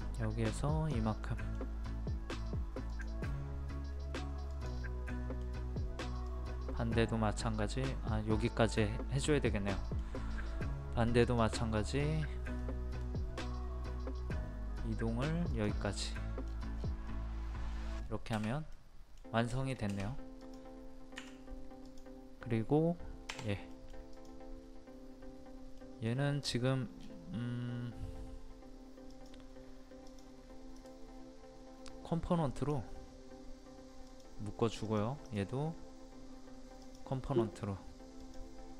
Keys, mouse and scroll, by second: 1.2 middle click, 1.8-2.9 scroll up 1, 2.9 click, 5.1 middle click, 6.2-9.5 drag, 9.7 middle click, 10.3-11.2 scroll up 1, 11.2 click, 12.6 middle click, 13.4 scroll up 1, 15.5 click, 16.1 middle click, 16.4-16.8 scroll down 1, 17.1 middle click, 18.0-18.5 scroll down 1, 18.7 middle click, 20.4 click, 21.1 Escape, 21.8 click, 23.3 Delete, 23.7 middle click, 24.1 click, 25.8 middle click, 26.5-27.1 scroll down 1, 27.1-27.6 scroll up 1, 29.1 click, 30.8 right click, 32.5 click, 35.2 right click, 36.8 click, 37.2 middle click, 38.2 click.